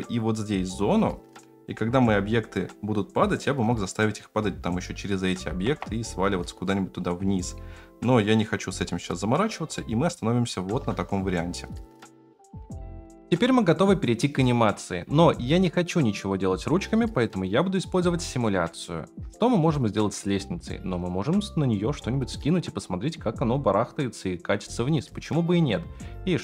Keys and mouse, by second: 5.8 KP_0, 9.8-10.7 shift+middle drag, 12.5 F8.